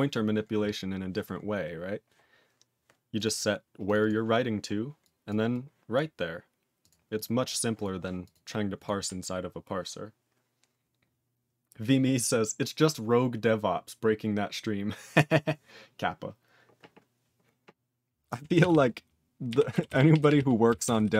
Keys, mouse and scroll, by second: 3.1 click, 3.2 click, 3.2 double click, 3.3 double click, 3.8 click, 3.9 click, 3.9 double click, 4.0 double click, 5.0 click, 5.2 click, 5.5 click, 5.9 click, 6.8 click, 6.8 click, 7.1 click, 7.2 click, 7.4 click, 7.8 click, 8.2 click, 8.3 click, 8.7 click, 8.8 click, 18.6 ctrl+s, 18.7 ctrl+p, 19.7 ctrl+e, 19.8 ctrl+s, 19.9 ctrl+p, 20.1 ctrl+p, 20.2 ctrl+p, 20.3 ctrl+e, 20.8 ctrl+s, 20.9 ctrl+p, 21.1 ctrl+p.